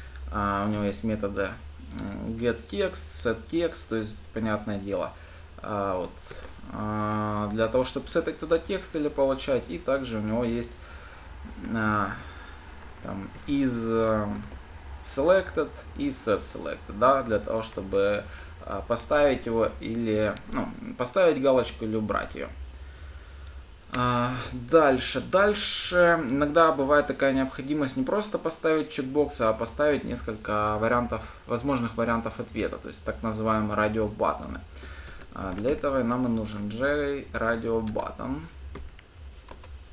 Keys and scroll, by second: 37.6 Return.